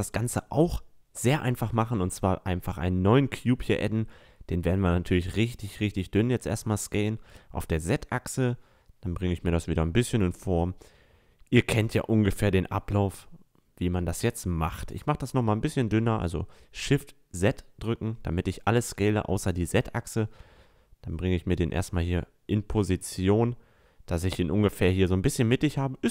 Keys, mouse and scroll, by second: 0.0 Tab, 1.5 a, 1.8 middle click, 3.4 s, 5.9 s, 8.0-9.9 drag, 8.8 s, 11.5 s, 14.4 s, 17.7-24.4 drag, 24.4-25.2 middle drag, 25.2 s.